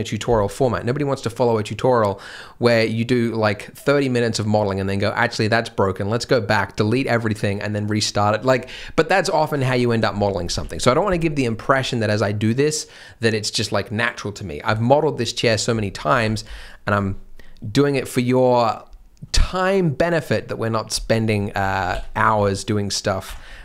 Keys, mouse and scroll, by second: 10.5 alt+a, 16.0 scroll up 1, 16.1 alt+a, 16.4 b, 21.1 scroll up 1, 21.4-21.8 scroll down 1, 21.9 alt+a, 22.2 c, 23.5 scroll down 1.